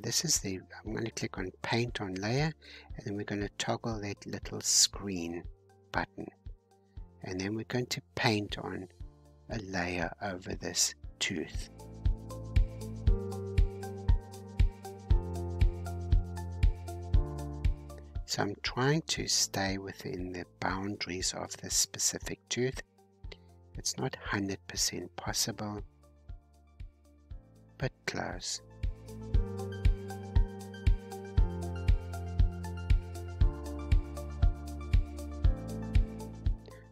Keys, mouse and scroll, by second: 5.8-7.2 scroll up 3, 7.2-8.2 drag, 8.2-9.1 scroll down 2, 9.1-22.6 drag, 22.6 middle click, 23.2 scroll down 1, 23.4-23.8 scroll up 5, 24.4-29.4 drag, 29.4-30.2 scroll down 2, 30.2-33.2 drag, 34.2-36.4 middle drag, 36.4-36.9 drag.